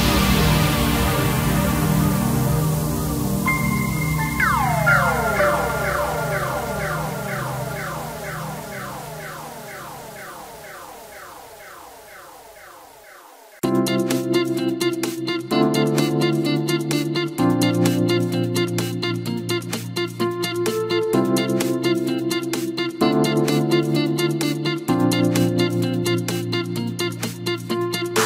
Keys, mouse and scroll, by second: 0.3 g, 2.8 ctrl+shift+b, 15.6-17.3 drag, 17.3-17.7 scroll down 2, 17.7-18.9 middle drag, 18.9-19.8 scroll up 2, 19.8 click, 20.4 shift+click, 21.2 shift+click, 22.0 f, 22.8 click, 23.5 shift+click, 23.9-25.0 middle drag, 25.0-26.4 f, 26.7-27.0 scroll down 1, 27.0 middle click, 27.8-28.2 scroll up 2.